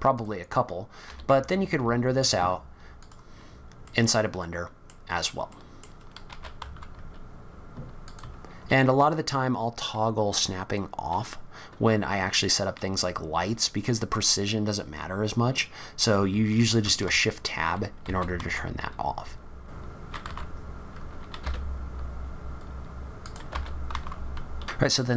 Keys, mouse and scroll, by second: 0.6-1.1 scroll down 3, 1.1 g, 3.4-3.8 scroll up 2, 3.8 middle click, 5.1-5.5 scroll down 3, 5.5 middle click, 6.3 g, 16.7 shift+Tab, 18.0 r, 19.9 g, 20.4 click, 20.5 g, 20.7 click.